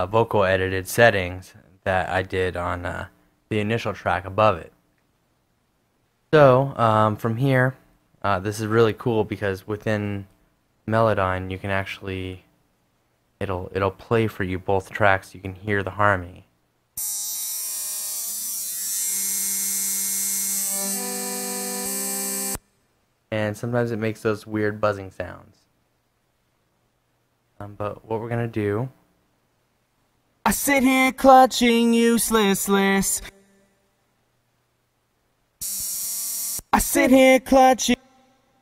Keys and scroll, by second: 26.4 super+z, 27.6 a, 30.2 space, 33.0 space, 36.4 space.